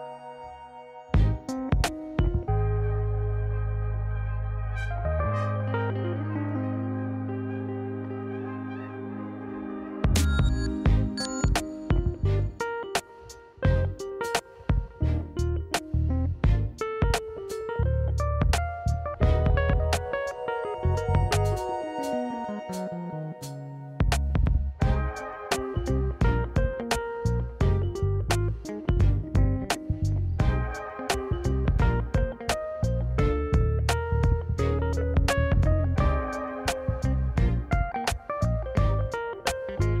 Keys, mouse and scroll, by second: 1.1-1.9 scroll down 1, 2.4 click, 2.4 scroll down 5, 2.8 middle click, 3.9 click, 4.3 middle click, 5.7 click, 5.9 click, 7.0 middle click, 7.7 middle click, 8.7 r, 10.2 middle click, 10.5 KP_1, 10.9 s, 11.9 KP_Decimal, 12.2 scroll down 2, 12.5 s, 13.8 s, 14.4 g, 15.9 middle click, 16.3 click, 16.5 middle click, 16.9 shift+a, 18.8 ctrl+a, 19.5 click, 19.7 middle click, 20.1 ctrl+a, 20.7 middle click, 21.7 KP_1, 22.1-23.5 drag, 24.0 click, 24.9 click, 25.3 click, 25.9 middle click, 27.1 KP_1, 27.8 s, 31.0 shift+d, 31.5 r, 32.9 click, 33.4 r, 37.1 shift+d, 38.1-40.0 drag.